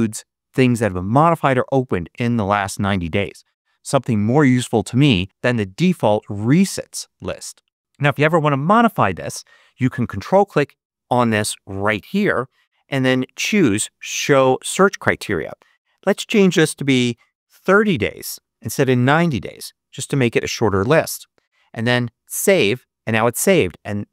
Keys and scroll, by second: 9.3 Up, 16.6-17.5 typing, 18.7 3, 19.1 0.